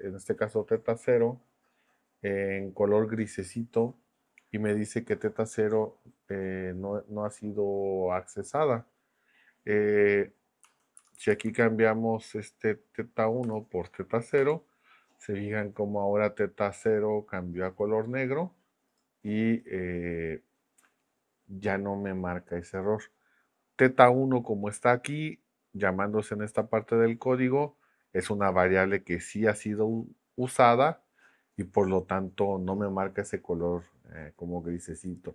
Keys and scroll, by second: 10.6 Down, 11.0 Left, 11.5 Left, 13.4 BackSpace, 14.4 0.